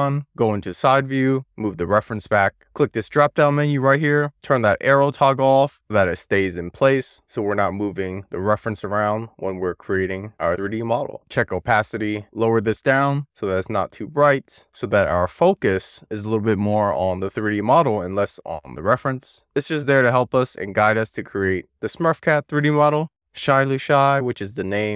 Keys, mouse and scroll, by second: 0.1-0.5 shift+middle drag, 1.2 alt+middle click, 1.3-1.6 scroll up 1, 1.7 click, 3.4-4.6 drag, 6.7 click, 7.5-8.0 middle drag, 8.1 click, 8.5 drag, 8.8 middle click, 9.4 shift+middle click, 10.9 click, 11.7 click, 12.0 click, 13.6-16.7 drag, 17.0-19.3 middle drag, 20.0 alt+middle click, 20.8 shift+middle click, 21.6-24.2 scroll up 1, 24.2 scroll up 1, 24.7 shift+middle click.